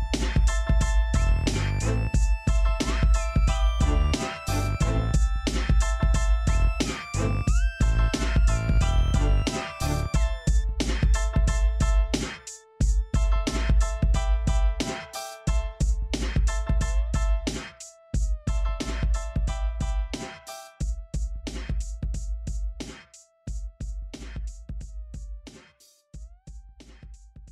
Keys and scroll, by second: 0.6 e, 3.6-8.1 typing, 14.1-14.5 typing, 17.5-18.5 typing, 24.0 typing, 25.3 Tab, 25.3 typing.